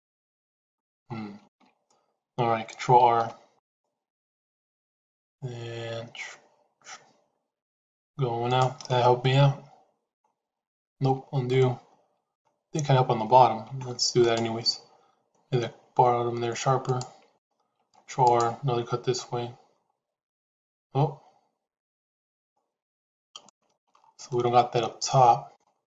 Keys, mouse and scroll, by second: 1.8 shift+z, 2.8 ctrl+r, 8.8-10.0 middle drag, 10.9 ctrl+z, 11.5 middle click, 17.7 ctrl+r, 23.4 shift+middle click, 23.7 shift+scroll down 2, 24.2-25.5 middle drag, 25.5 scroll down 2, 25.8 middle click.